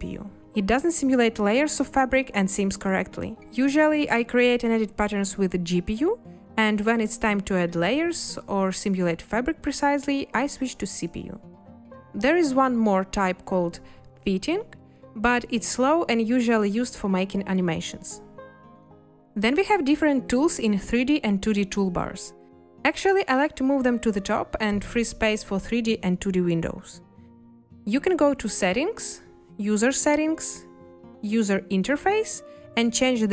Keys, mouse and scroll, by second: 0.8 space.